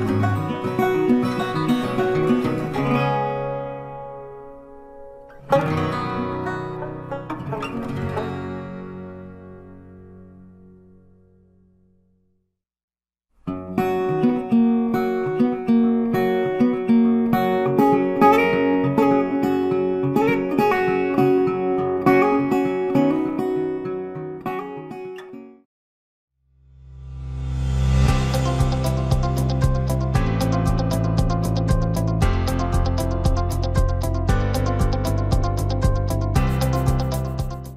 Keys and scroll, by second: 3.4 ctrl+t.